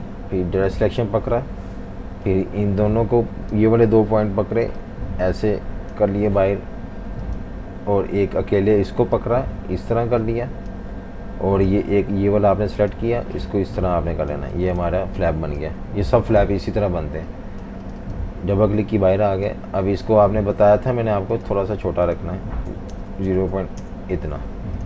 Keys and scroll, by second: 14.7 v, 15.6 super+-, 15.8 super+-, 16.4 v, 22.4-24.8 typing.